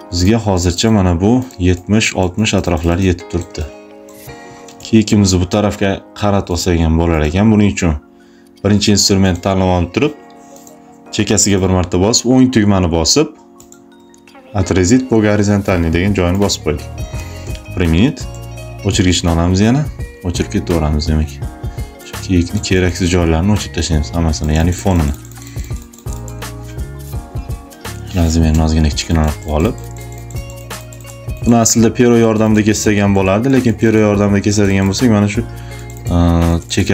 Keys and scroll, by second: 2.7 space, 4.5 space, 17.2 Return, 18.1 e, 26.8 [.